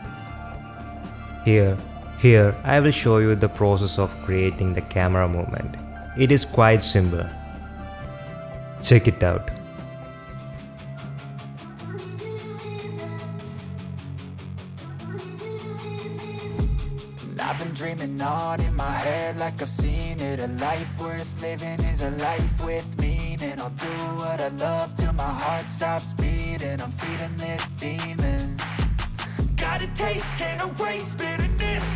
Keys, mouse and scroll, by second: 3.4 shift+middle click, 3.8-5.8 shift+middle drag, 5.8 shift+click, 7.1 ctrl+alt+KP_0, 8.8 i, 11.0-11.6 middle drag, 11.7 shift+middle drag, 11.9 middle drag, 12.3 shift+drag, 12.7-13.0 middle drag, 13.0-13.4 shift+middle drag, 13.4 middle click, 13.6 shift+middle click, 13.7 shift+middle click, 13.9 shift+middle click, 14.1 middle drag, 14.2 shift+click, 14.2 shift+middle click, 14.4 middle click, 14.5 shift+click, 14.7 middle click, 14.8 shift+click, 14.8 shift+middle click, 15.0 shift+click, 15.5 ctrl+z, 15.5 i, 16.2 click, 17.2 ctrl+alt+KP_0, 18.1 i, 19.5 space, 25.3 space, 25.5 z, 26.6-29.5 drag, 30.1-31.4 drag, 31.7 click.